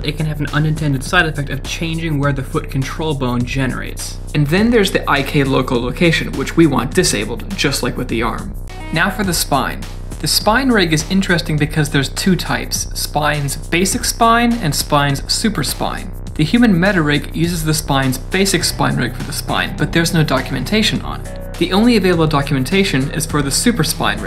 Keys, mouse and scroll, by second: 0.9 ctrl+z, 1.6 ctrl+z, 1.9 middle click, 2.2 shift+middle click, 2.3 scroll up 2, 2.5 middle click, 3.1 click, 7.5 click.